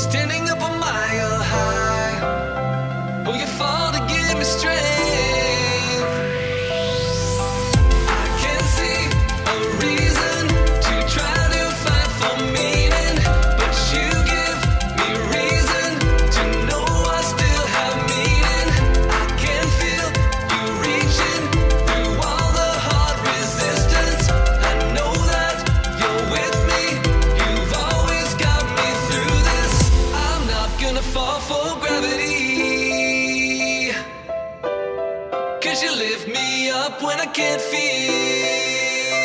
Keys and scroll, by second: 0.2 space, 2.3 +, 2.3 space, 2.5 +, 4.0 space, 8.7 space, 14.0-15.7 typing, 22.8 space, 26.6 -, 26.8 space, 26.9 +, 27.0 space, 31.1 space, 35.8-37.0 typing, 38.3 space, 39.0 space.